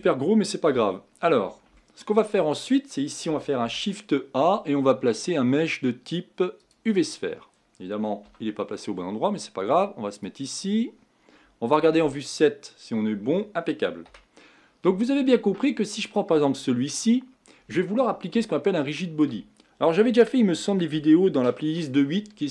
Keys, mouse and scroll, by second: 0.7 KP_1, 1.8-3.6 shift+middle drag, 3.6 shift+a, 8.2 g, 12.0 KP_7, 14.0 KP_1, 14.7 scroll down 1, 15.3-16.0 scroll up 2, 16.0-18.0 drag, 18.0-18.4 scroll down 1, 18.5-22.5 shift+middle drag.